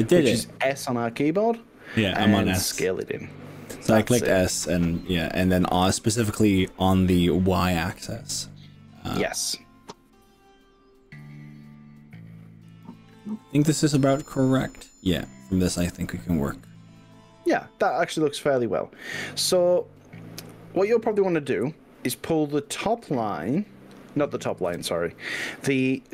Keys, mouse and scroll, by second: 12.8 click, 13.2-16.4 middle drag, 18.2-19.8 middle drag, 24.7 KP_3, 26.0 click.